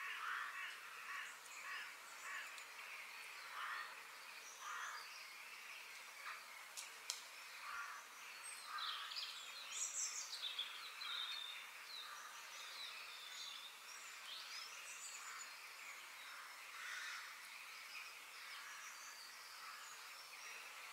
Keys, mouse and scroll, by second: 2.6-4.5 middle drag, 8.5-10.4 middle drag, 18.0 g.